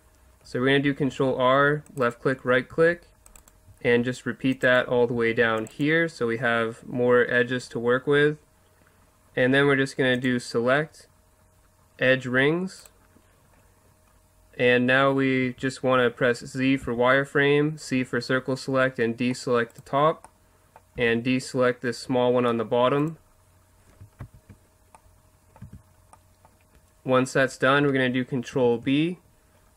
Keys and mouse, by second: 1.0 ctrl+r, 2.1-4.0 drag, 2.7 ctrl+r, 4.0 ctrl+r, 4.7-5.9 drag, 5.1 ctrl+r, 15.4 z, 16.8 c, 19.7-21.0 drag, 21.0 c, 24.2 ctrl+z, 25.6 z, 28.5 ctrl+b.